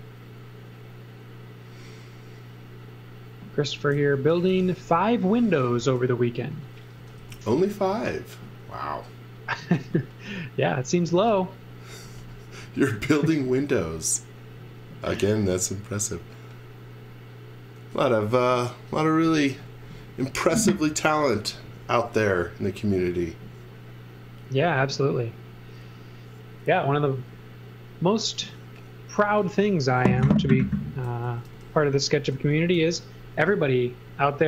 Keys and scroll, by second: 3.7-7.9 typing, 9.6 z, 11.0 x, 12.1 v, 13.2 v, 31.0-34.4 typing.